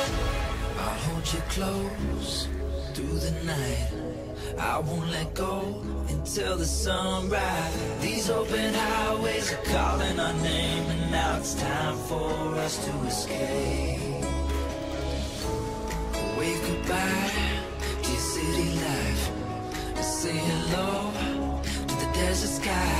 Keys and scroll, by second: 2.9 j, 3.8 ], 8.8 h.